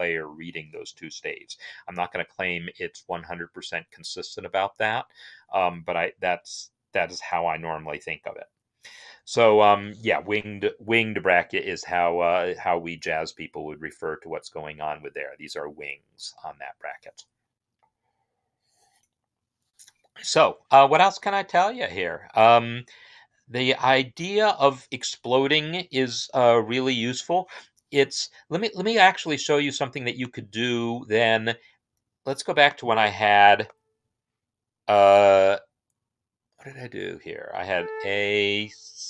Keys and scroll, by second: 33.5 4, 37.4 typing, 38.8-39.0 typing.